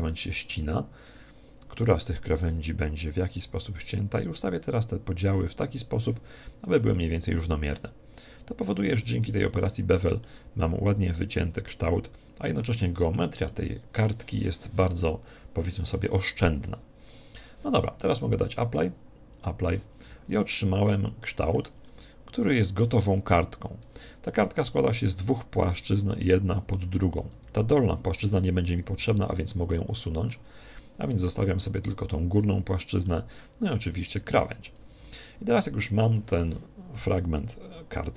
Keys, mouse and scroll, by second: 6.5-6.9 scroll down 1, 6.9-8.5 middle drag, 9.3-10.1 scroll down 1, 10.1-11.9 middle drag, 13.1-14.7 middle drag, 18.3 click, 20.0 Tab, 20.8-23.7 middle drag, 24.2 ctrl+Tab, 25.5-28.8 right drag, 29.0 x, 30.4-32.7 middle drag, 32.3 right click, 33.0-34.7 middle drag, 34.9 Tab.